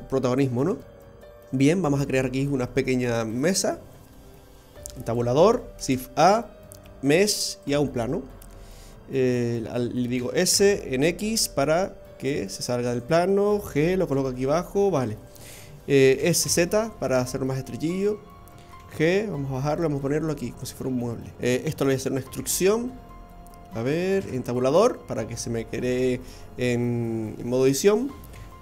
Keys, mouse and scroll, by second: 2.7 Tab, 4.3 Tab, 6.0 click, 6.0 shift+a, 10.1 s, 16.1 s, 19.9 g, 21.8 middle click, 22.3 e, 24.2 Tab, 28.3 e.